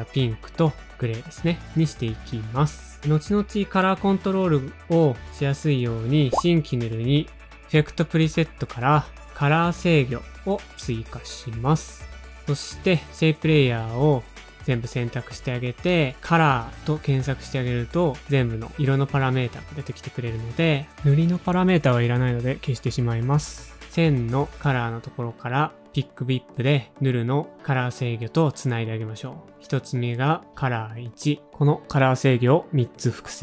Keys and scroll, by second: 7.0 alt+shift+super+y, 9.2-10.3 typing, 13.0 shift+super+a, 13.0 alt+shift+super+y, 13.0 typing, 17.0-18.1 typing, 22.0 BackSpace, 22.7 BackSpace, 23.7 BackSpace, 30.6 Return, 31.0 typing, 31.5 super+d, 32.1 super+d.